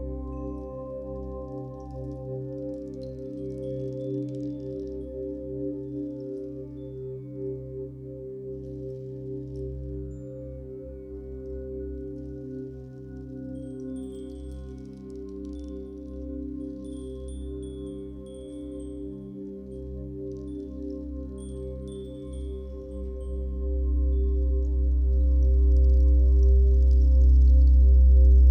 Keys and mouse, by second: 1.7-3.2 typing, 2.6 Return, 3.8 click, 4.3-6.5 typing, 5.8-6.4 drag, 7.8 space, 9.4 click, 10.6 click, 12.4 space, 13.4 ctrl+s, 14.0 click, 14.6 click, 15.6 click, 16.5 shift+click, 17.9 ctrl+s, 22.3-25.3 ctrl+alt+drag, 25.3 0, 26.2-27.6 ctrl+alt+drag, 27.9 ctrl+alt+click.